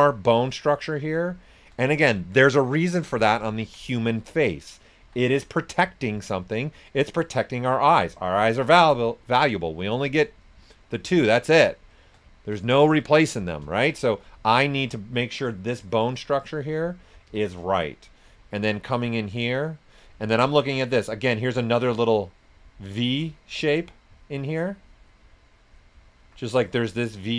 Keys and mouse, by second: 1.2 click, 1.9 ctrl+right click, 4.0 click, 5.0 s, 5.0 click, 6.6 right click, 7.0 click, 12.3 ctrl+right click, 14.3 click, 15.6 right click, 16.5 click, 17.2 s, 17.3 click, 17.9 right click, 18.5 click, 21.3-26.5 alt+drag, 26.5 right click, 27.2 click.